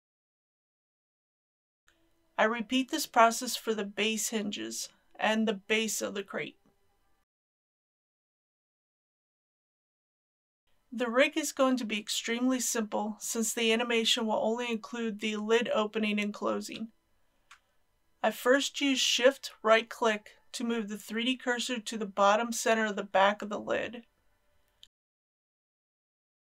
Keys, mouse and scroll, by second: 3.6 click, 4.8 shift+click, 6.6 ctrl+p, 7.6 click, 8.6 g, 9.4 click, 10.0 ctrl+z, 12.7 click, 13.6-14.8 middle drag, 17.5-18.2 scroll up 1, 18.9 shift+right click, 23.2 shift+right click.